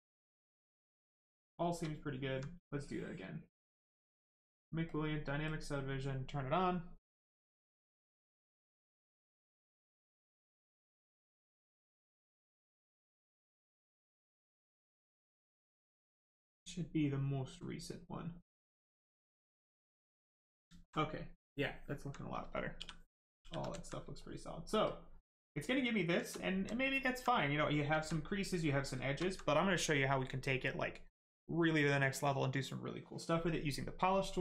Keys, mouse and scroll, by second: 0.7 right click, 1.8 alt+right click, 2.7 click, 2.8 click, 9.3 click, 18.2 click, 19.1 right click, 20.7 alt+right click, 21.8 alt+right click, 22.5 shift+right click, 22.7 shift+f, 23.3 shift+f, 24.1 right click, 24.8 click, 25.3 right click, 26.1 shift+right click, 26.3 alt+right click, 27.3 right click, 27.3 right click, 27.9 alt+right click, 28.7 right click, 28.8 right click, 28.9 shift+right click, 29.1 alt+right click.